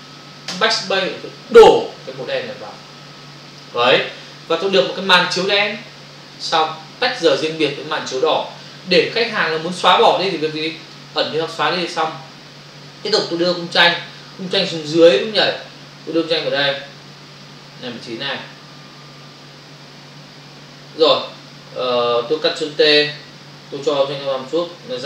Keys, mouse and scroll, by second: 0.4 alt+BackSpace, 10.2 click, 10.8 click, 10.9 double click, 13.4 click, 13.8 click, 16.4 click, 21.4 click, 24.7 click.